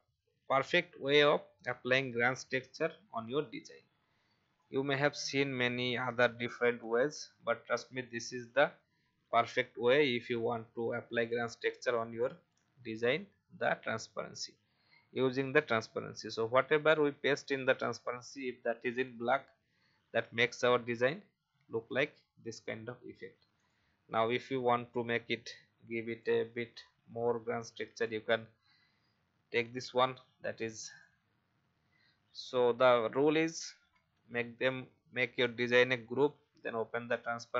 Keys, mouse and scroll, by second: 0.6 ctrl+v, 4.5-6.2 shift+drag, 8.0-17.8 drag, 20.0 alt+scroll up 1, 21.2 alt+scroll down 1, 23.5 click, 24.4-26.1 scroll up 1, 26.1-28.9 drag, 27.0 Delete, 29.6 ctrl+c, 30.9 click, 33.9 Delete, 35.4-37.1 drag.